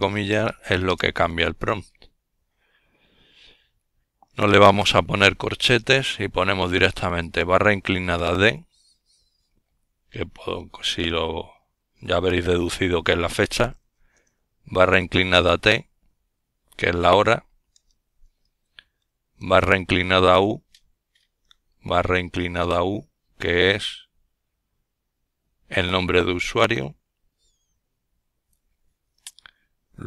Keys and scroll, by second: 3.0 typing, 4.5 typing, 10.0 typing, 11.5 typing, 15.7-16.6 typing, 27.2 typing.